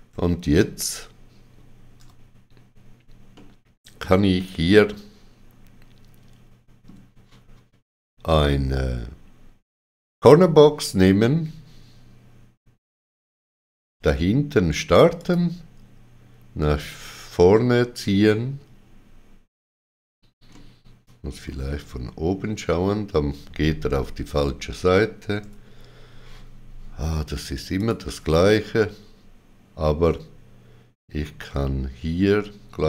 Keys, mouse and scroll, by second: 3.3 middle click, 4.3 shift+middle click, 10.2 click, 15.1 click, 15.2 shift+middle click, 20.5 middle click, 27.7 click.